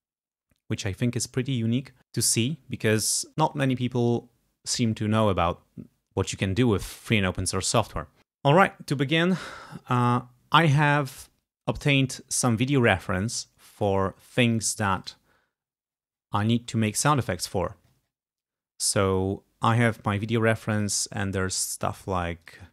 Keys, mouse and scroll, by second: 11.2 click, 13.7 click, 14.9 click, 16.0-16.4 scroll down 2, 17.7-18.3 scroll up 2, 20.8 click, 22.5 click.